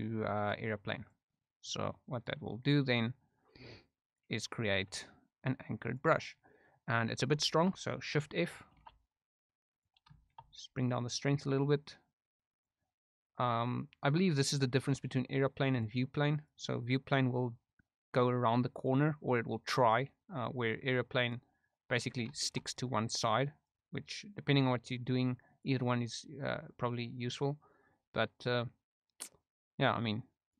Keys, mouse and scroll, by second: 1.7 middle click, 2.1 click, 2.6 middle click, 3.3 click, 4.4 middle click, 5.4 click, 6.2 middle click, 6.8 middle click, 7.4 shift+middle click, 8.8 shift+f, 10.2 shift+middle click, 10.4 middle click, 11.0-12.6 drag, 15.8 click, 17.1-18.8 drag, 19.1 middle click, 21.4 click, 22.4 shift+middle click, 22.8 click, 25.5-27.4 drag, 27.6 middle click, 29.4-30.5 drag.